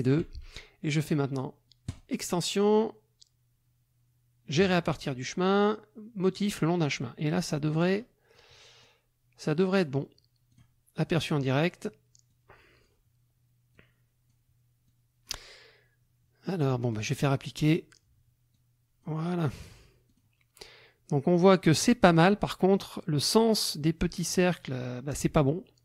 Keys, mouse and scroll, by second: 0.0 shift+click, 1.9 click, 6.5 click, 7.7 click, 8.8 click, 10.5 click, 12.3 click, 13.7 click, 14.9 click, 16.9 click, 18.5 click, 19.4 middle click, 20.1 click.